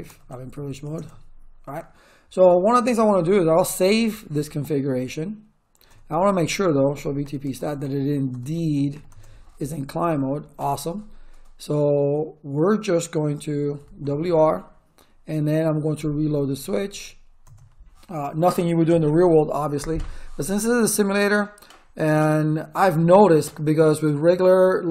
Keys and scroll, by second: 0.0-1.3 typing, 3.3-4.2 typing, 5.8-9.4 typing, 13.3-14.2 typing, 15.6-17.3 typing, 17.4 Return, 18.8 Return.